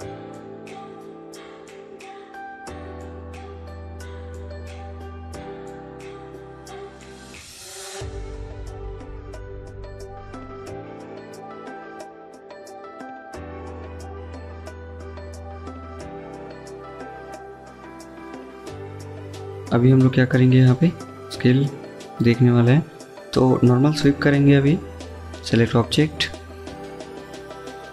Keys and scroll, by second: 12.0 Escape, 12.4 Escape, 16.4 Escape, 16.6 Escape, 22.3-23.8 typing, 27.6-27.9 typing.